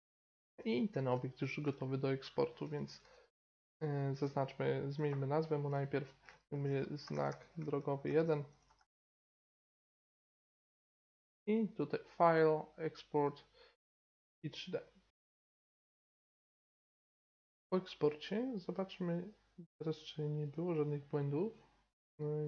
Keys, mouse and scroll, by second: 0.9 Tab, 3.0 t, 4.9-6.9 drag, 11.7-13.6 drag, 16.7 click, 16.8 Page_Up.